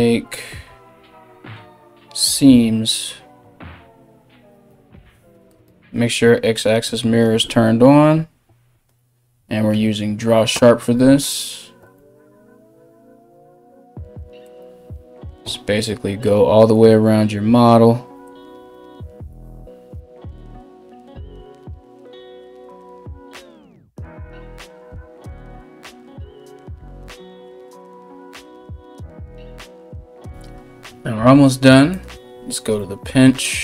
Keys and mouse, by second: 27.5 KP_1.